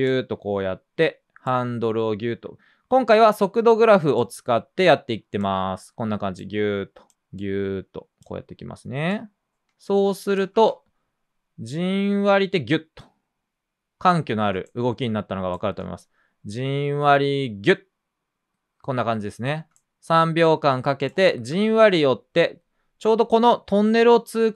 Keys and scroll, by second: 10.5 space, 14.4 space, 15.7 space, 21.6 space.